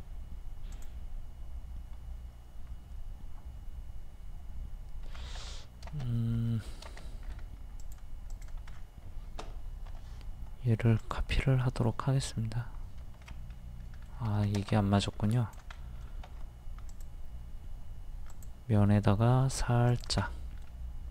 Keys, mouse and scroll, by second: 5.0 Escape, 5.4-5.7 scroll up 1, 6.5 middle click, 7.3 scroll up 1, 7.8 click, 8.7-9.1 scroll down 1, 9.9 m, 11.0 ctrl+click, 13.2 Escape, 13.3 middle click, 14.3 Escape, 15.3 e, 15.3 click, 15.8 middle click, 16.3 a, 16.9 click, 20.2 middle click.